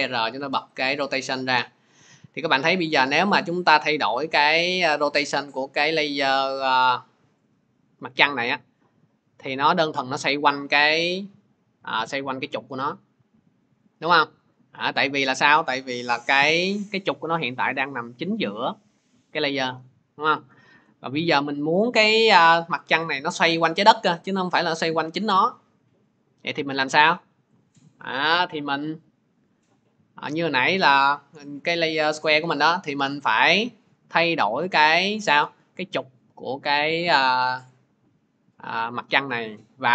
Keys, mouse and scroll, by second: 0.7 click, 2.6 middle click, 7.7 middle click, 14.8 click, 20.0 click, 20.5 ctrl+z.